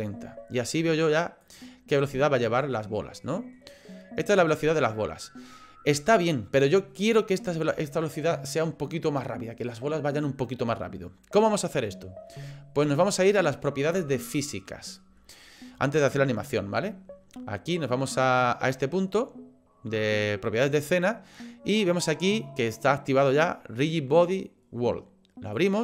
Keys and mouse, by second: 1.4 click, 2.1 middle click, 3.3 middle click, 4.3 middle click, 7.4 click, 13.3 click, 14.5 middle click, 20.8 click, 25.6 click.